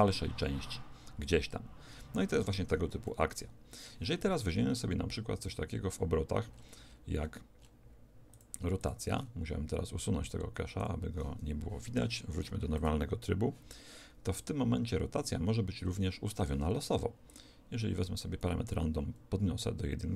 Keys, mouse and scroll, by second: 3.1-8.3 middle drag, 8.3-15.8 drag, 9.2 middle click, 15.8-18.9 middle drag, 17.3 click.